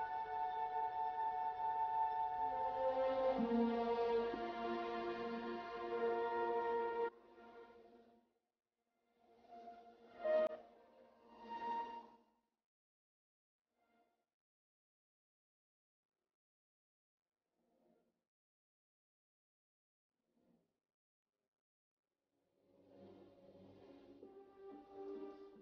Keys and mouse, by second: 0.9 s, 4.5 s, 8.9 s, 12.0 s, 14.5 s, 19.8-21.6 right drag, 19.8 s, 23.3 middle click, 23.6 middle click, 24.2 ctrl+z, 25.2 e.